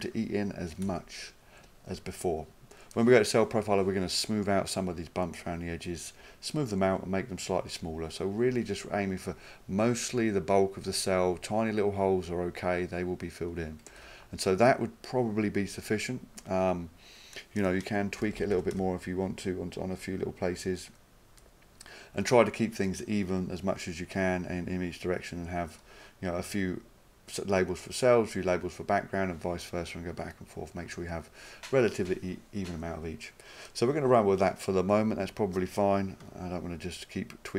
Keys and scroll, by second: 0.9 s, 14.0 s, 25.8 1, 36.2 2.